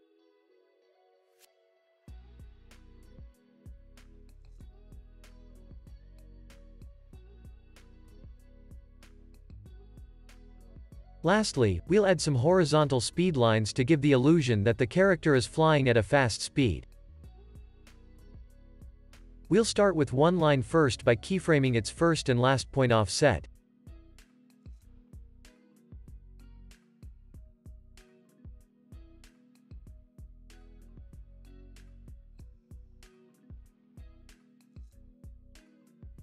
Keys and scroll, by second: 8.2 space, 11.6 space, 11.9 super+s, 17.1 super+s, 25.9 super+s, 31.7 x.